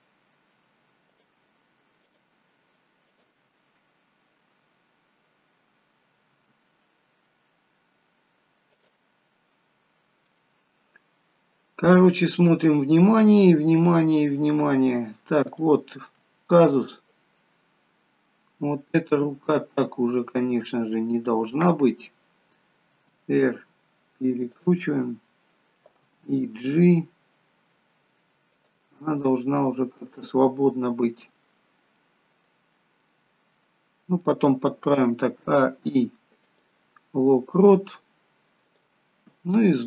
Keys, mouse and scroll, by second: 1.0 shift+click, 6.4 r, 9.2 middle click, 10.6-11.1 scroll down 3, 11.1 middle click, 11.1-12.2 scroll down 1, 13.7 click, 14.2-14.8 scroll down 1, 14.8-15.4 scroll down 1, 15.4 shift+middle click, 16.2-17.2 scroll up 1, 17.2-17.9 scroll up 2, 20.1 click, 21.1 click, 22.9 r, 26.0 g, 29.0 middle click, 31.4-32.5 scroll down 4, 32.5 middle click, 35.0 a, 35.3 i, 38.6 click, 39.1-39.8 scroll down 4, 39.6 middle click.